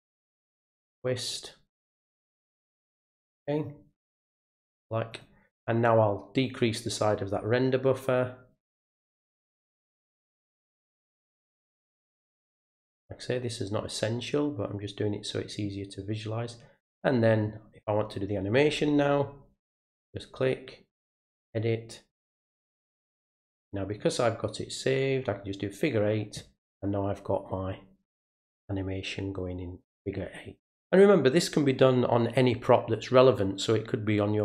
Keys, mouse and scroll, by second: 1.8-3.6 drag, 5.1 click, 6.7-8.0 drag, 8.7 click, 10.9-12.0 drag, 13.8-15.5 drag, 15.9 click, 16.9 click, 19.8 right click, 21.1 click, 23.3 click, 24.9 click, 25.7 click.